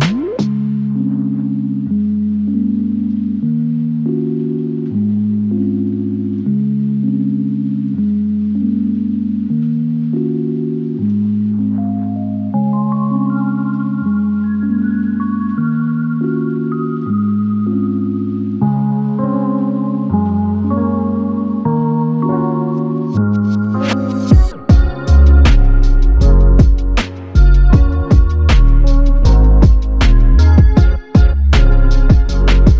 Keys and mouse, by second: 5.8 double click, 9.2 double click, 15.4 double click, 20.1 double click.